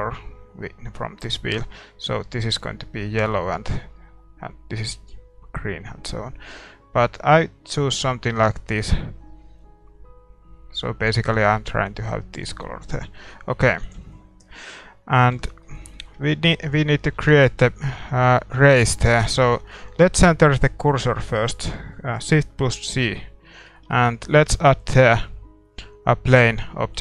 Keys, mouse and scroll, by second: 13.3-15.0 middle drag, 13.8 ctrl+s, 15.0 scroll down 1, 15.4 shift+z, 15.6-22.9 middle drag, 17.1 a, 17.6 ctrl+s, 19.0 ctrl+s, 19.0-22.9 drag, 22.9 shift+c, 23.6-26.3 middle drag, 26.3 shift+a.